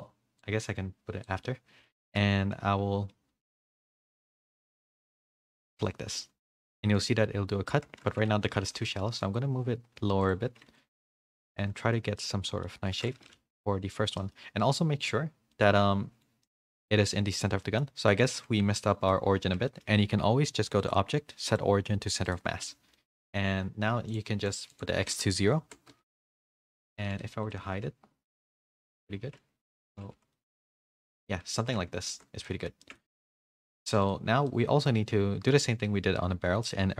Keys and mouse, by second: 0.4-1.2 drag, 2.0 shift+middle drag, 4.4 click, 6.4 h, 6.6-8.6 middle drag, 7.8 ctrl+z, 8.9 g, 10.9 h, 11.2-11.9 middle drag, 12.2-12.6 middle drag, 12.9 ctrl+z, 13.3-13.9 middle drag, 14.2 middle click, 15.5-16.2 middle drag, 16.4-16.8 middle drag, 17.3-17.7 middle drag, 18.1-19.0 middle drag, 19.7 shift+middle drag, 22.3 click, 22.9 middle drag, 24.1-26.2 drag, 26.4 middle drag, 27.2 h, 27.4-28.2 middle drag, 28.4 ctrl+z, 29.1 g, 30.1 h, 30.3-31.1 middle drag, 31.1-31.5 drag, 32.1 ctrl+z, 32.4 middle click, 32.8 shift+middle drag, 33.3-34.2 drag, 34.4-34.8 middle drag, 36.4 middle click.